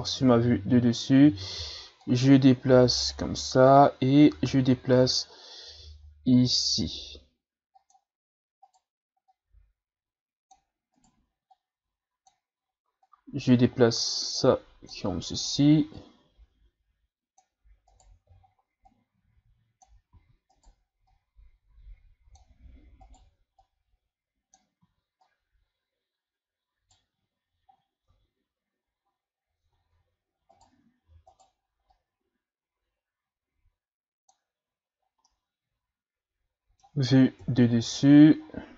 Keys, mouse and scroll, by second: 2.0-3.7 drag, 3.7 e, 8.6 right click, 9.3-11.0 drag, 11.0 right click, 11.5-15.3 drag, 15.3 right click, 15.9-17.9 drag, 17.9 right click, 18.4-18.9 shift+scroll up 3, 18.9-20.2 drag, 20.2 ctrl+z, 20.5 right click, 21.1-23.1 drag, 23.1 right click, 23.6 click, 24.8 ctrl+z, 25.3 right click, 27.7-28.1 scroll down 1, 28.1 Tab, 29.1-29.6 scroll up 2, 29.6 Tab, 30.5 right click, 31.3 right click, 31.9 click, 35.0 scroll down 2, 35.3-37.4 middle drag, 37.4 KP_7, 38.4-38.7 shift+scroll down 3.